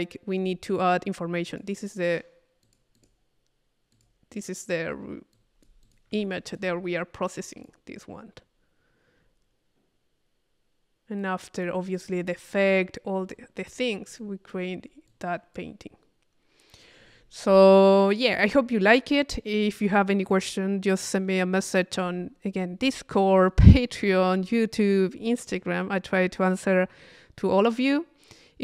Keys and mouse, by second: 1.5 click, 2.6 click, 3.9 click, 5.3 click, 6.3 p, 6.5 click, 7.4 click, 11.2-12.6 drag, 13.3 click, 14.2 click, 15.1 click.